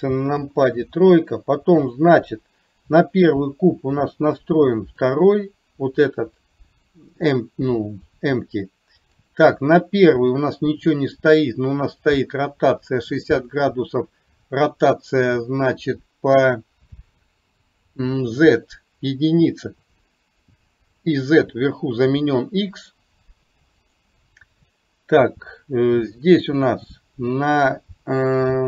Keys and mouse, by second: 0.3 KP_3.